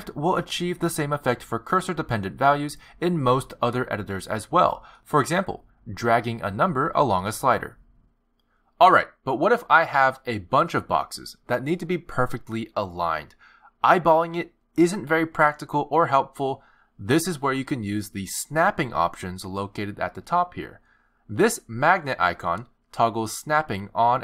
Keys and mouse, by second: 0.8 click, 9.2 r, 9.5 alt+g, 15.0 g, 17.7 middle click, 20.5 g, 23.7 click.